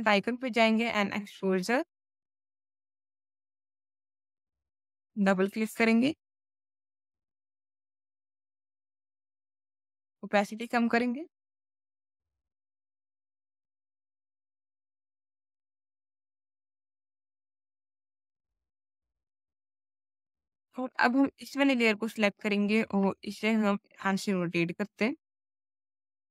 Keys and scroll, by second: 13.1 space, 13.7 ctrl+z.